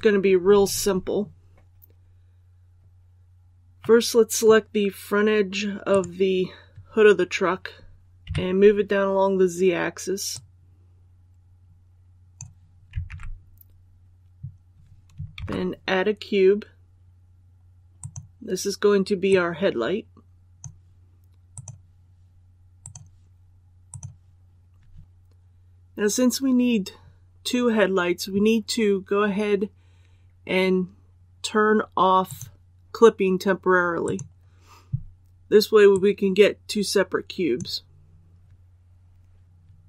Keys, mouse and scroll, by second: 3.7-5.1 middle drag, 5.8 right click, 8.2 KP_3, 10.2-12.8 drag, 13.0 alt+a, 15.3 shift+a, 17.9-21.1 drag, 25.0 KP_1, 32.2-38.1 drag.